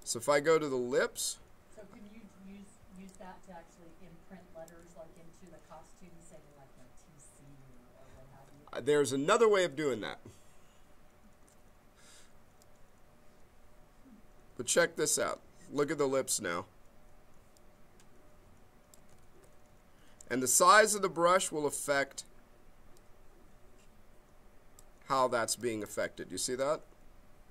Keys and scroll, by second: 2.9 b, 19.2 ctrl+z, 20.2 b.